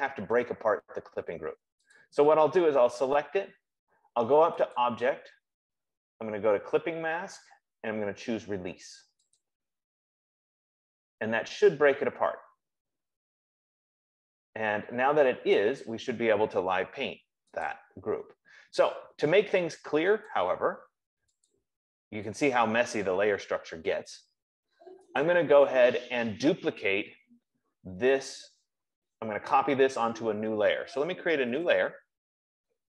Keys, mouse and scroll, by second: 2.3 click, 5.1 click, 9.8 click, 18.2 click, 20.6 click, 22.0 click, 22.9 click, 24.6 F15, 25.5 click, 32.0 click.